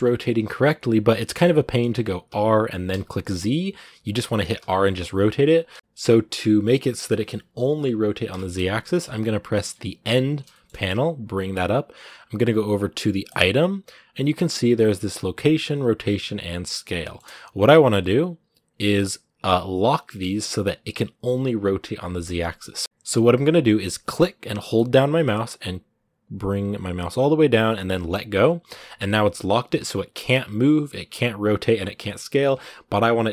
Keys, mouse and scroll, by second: 1.0 middle click, 1.7-2.1 scroll up 1, 2.1 r, 5.6-9.8 shift+middle drag, 9.8 n, 10.3-22.8 shift+middle drag, 22.8-33.3 drag.